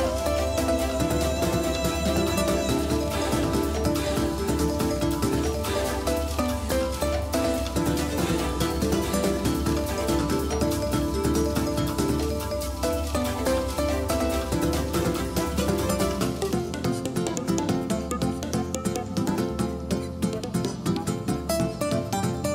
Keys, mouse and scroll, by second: 2.5-4.7 drag, 6.5 s, 8.8 x, 10.9 s, 19.0 Tab, 20.8 ctrl+r.